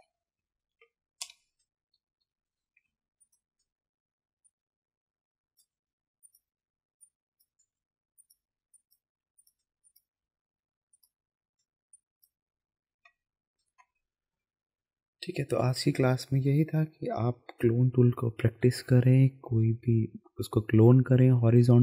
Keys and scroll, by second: 1.2-2.8 typing, 13.1 ctrl+KP_0.